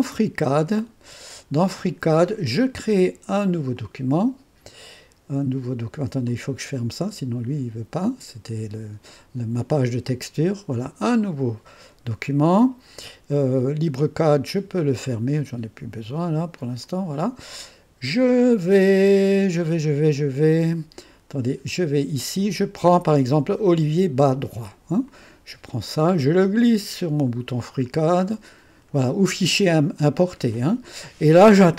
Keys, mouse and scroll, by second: 0.0 click, 1.1 click, 3.7 click, 6.2 click, 8.0 click, 10.0 click, 13.9 click, 15.1 click, 16.8 click, 18.3 click, 20.5 click, 21.7 click, 22.0 click, 25.0-29.3 drag.